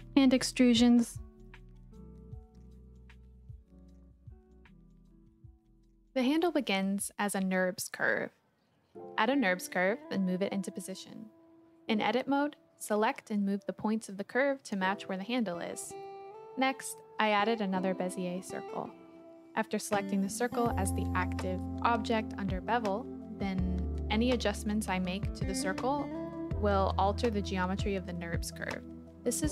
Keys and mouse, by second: 1.0 e, 5.5 shift+a, 9.3 g, 9.6 x, 10.6 click, 10.8 g, 11.0 z, 14.2 e, 16.1 click, 16.4-17.1 typing, 17.6 Return, 18.9 s, 19.5 click, 20.1-21.8 drag, 23.6 Tab, 24.0 KP_Decimal, 25.2 shift+click, 25.4 shift+middle click, 26.8-28.2 drag, 29.1 s.